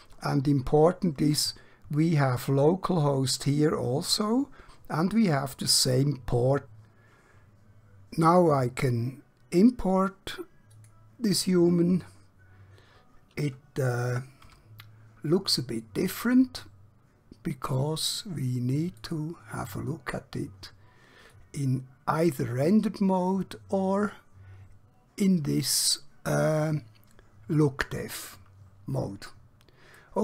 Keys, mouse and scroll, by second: 10.7 click, 14.4 Home, 15.7-16.1 scroll up 1, 16.5-17.2 scroll down 1, 19.0 click, 30.0-30.2 middle click.